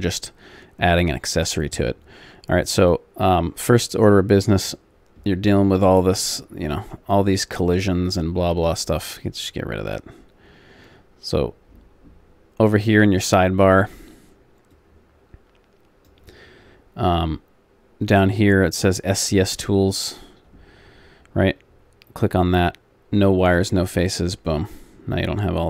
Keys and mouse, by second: 4.4-6.3 drag, 6.3-8.0 middle drag, 11.7-14.7 middle drag, 14.7 click, 15.6-18.0 drag, 19.2-21.2 drag, 21.2-22.6 middle drag, 23.1-25.2 drag.